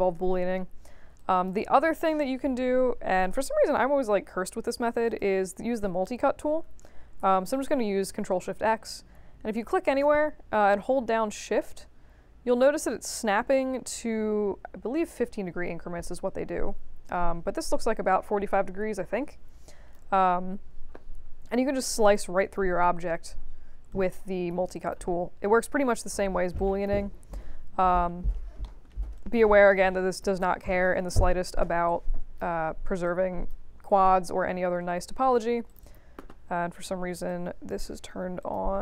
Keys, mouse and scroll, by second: 1.1 alt+drag, 1.6 space, 3.1 space, 3.6 f, 3.8 middle click, 4.5 middle click, 5.0 click, 7.2 ctrl+shift+x, 9.5-19.9 drag, 21.1 middle click, 23.9 right click, 24.7 drag, 26.5-26.8 drag, 28.0 scroll up 2, 28.6 alt+middle click, 29.1 right click, 30.1 click, 30.8 ctrl+e, 31.1-31.6 middle drag, 31.8-32.3 drag, 33.0-33.4 drag, 35.6 click, 35.8 click, 37.2 click, 38.4 click.